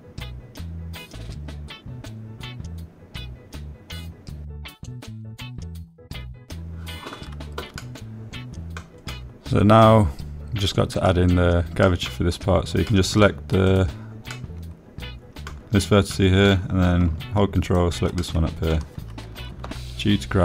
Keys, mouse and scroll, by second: 0.4 click, 1.6-4.0 middle drag, 4.5 middle click, 7.6 space, 10.5 middle click, 11.8-13.8 drag, 14.5 middle click, 15.6 middle click, 16.4 click, 17.0-18.2 middle drag, 18.9 middle click.